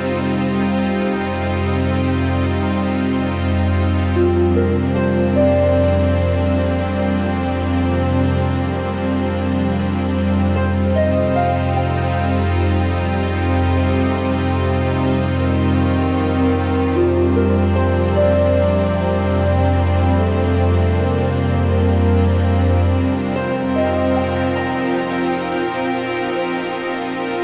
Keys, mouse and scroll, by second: 2.4 alt+middle click, 2.6 scroll up 3, 3.1 scroll down 1, 3.4 g, 3.6 alt+middle click, 5.0 click, 6.0 click, 6.2 click, 6.3 click, 6.9 Escape, 8.1 middle click, 9.5 click, 10.6 click, 11.9 click, 12.1 ctrl+z, 12.6 click, 14.7 click, 15.4 alt+middle click, 17.2 click, 17.4-17.7 scroll, 18.1 scroll, 20.0 click, 20.1 ctrl+z, 20.4 click, 22.7 alt+middle click, 23.4 click, 24.2 a, 24.5 click, 25.3 click, 25.7 q, 26.9 click.